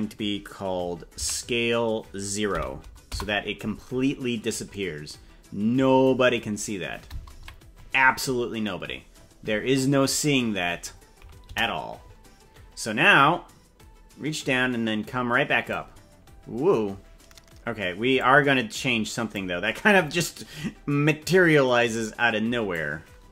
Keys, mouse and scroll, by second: 1.2 s, 6.2-6.6 scroll up 6, 7.4 KP_Decimal, 8.2 scroll up 1, 9.0-9.4 scroll up 5, 9.6-11.4 scroll down 28, 11.4 KP_0, 13.0-15.7 drag, 18.1-19.3 drag, 21.0-22.7 drag.